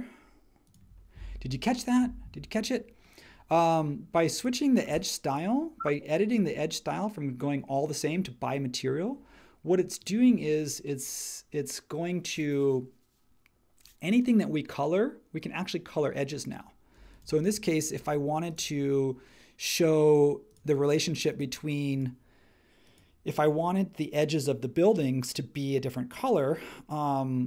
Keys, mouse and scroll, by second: 17.5 space.